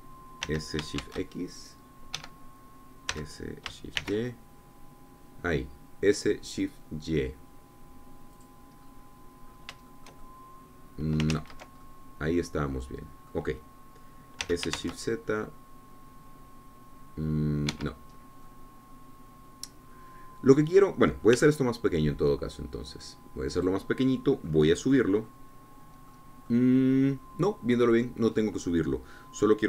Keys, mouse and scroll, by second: 1.4 s, 1.9 shift+x, 3.1 Escape, 4.1 s, 4.9 shift+y, 9.3 click, 9.7-10.3 scroll up 2, 10.4-10.8 scroll up 3, 10.8-12.2 shift+drag, 12.2 ctrl+z, 12.8-14.4 ctrl+drag, 15.4 s, 15.7 shift+z, 18.6 Escape, 19.1 scroll down 1, 19.4-22.3 drag, 22.3 s, 24.5 click, 24.8-29.4 drag.